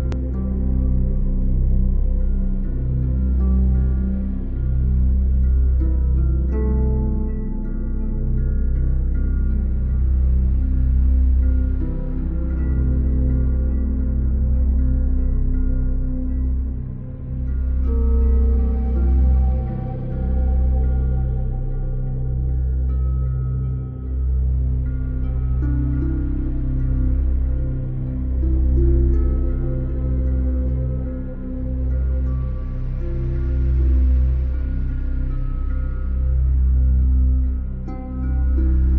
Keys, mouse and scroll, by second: 1.2 middle click, 1.5 middle click, 2.9 click, 3.6 middle click, 3.8 middle click, 4.1 middle click, 5.1 click, 7.6 middle click, 8.8 click, 10.5 alt+click, 12.4 middle click, 14.7-16.0 scroll, 14.8 middle click, 16.6 middle click, 17.5-18.2 scroll, 18.2 alt+right click, 19.4 alt+click, 20.2 scroll, 20.5 click, 24.5 middle click, 25.0-25.5 scroll, 25.6-26.7 scroll, 29.7 alt+click, 31.6 middle click, 33.6 middle click, 35.2 middle click, 36.4 click.